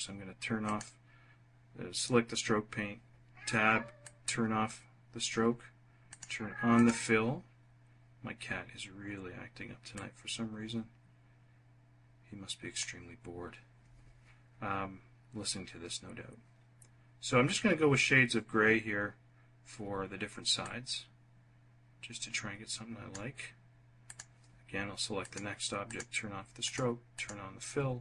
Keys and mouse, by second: 3.8 click, 5.9 click, 6.5 click, 9.7-12.7 drag, 20.4-23.0 drag, 23.8 click, 25.0 click, 25.6 click, 26.4 click, 26.9 click.